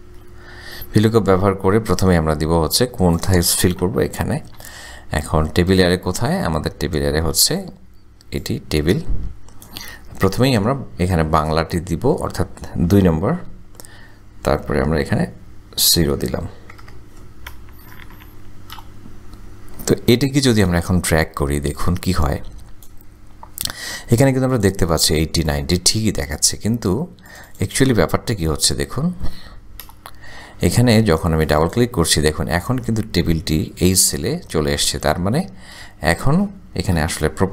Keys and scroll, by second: 0.0-0.4 typing, 0.5 Tab, 4.6 ,, 13.8 KP_2, 14.6 ,, 16.8 KP_0, 18.1 shift+0, 18.8 shift+Return, 30.0 Return, 37.2 Return.